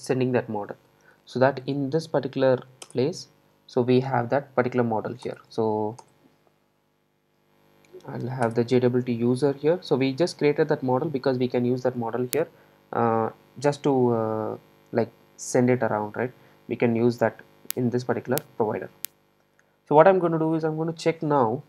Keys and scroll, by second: 1.1 super+e.